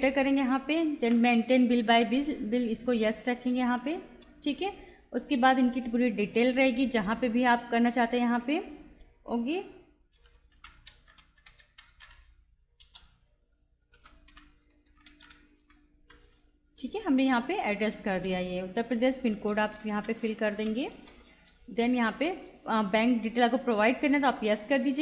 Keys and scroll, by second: 3.6 Return, 9.9-12.5 typing, 12.8 Return, 13.7-16.5 typing, 16.8 Return, 19.3-21.1 typing.